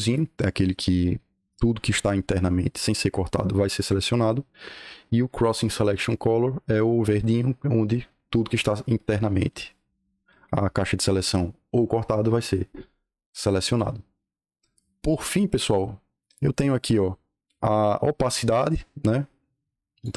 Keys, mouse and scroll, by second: 19.4-19.9 drag.